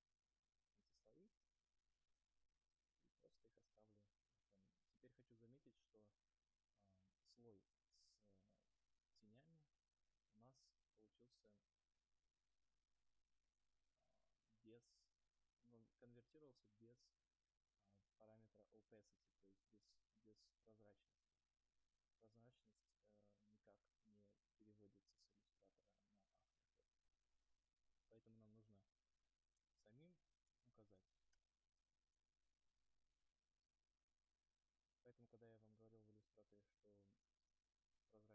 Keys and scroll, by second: 30.4 BackSpace, 31.4 Return.